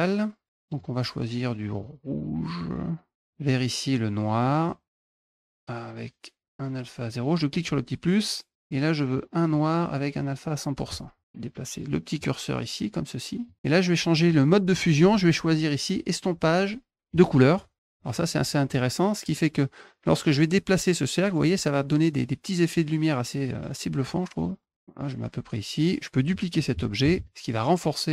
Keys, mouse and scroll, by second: 0.5 click, 1.6-3.1 drag, 4.3 click, 7.4 click, 8.9 click, 10.0 click, 12.0-13.3 drag, 14.5 click, 14.8-15.5 scroll down 1, 16.9 click, 18.1 click, 18.5 middle click, 19.1-25.9 drag, 26.9 ctrl+d, 27.5-28.1 drag.